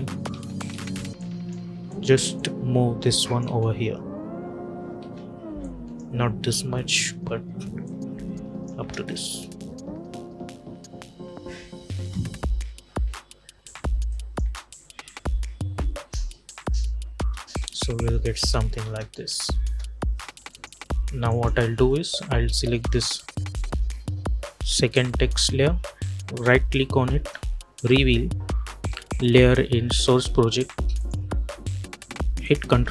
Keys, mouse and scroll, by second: 0.2 space, 1.1 click, 3.4 space, 5.5 click, 6.4-7.0 typing, 7.7 click, 8.7 space, 11.8 space, 12.5 -, 12.9 -, 14.0 click, 14.3 space, 17.0 space, 20.4 click, 26.2 right click, 30.8 click.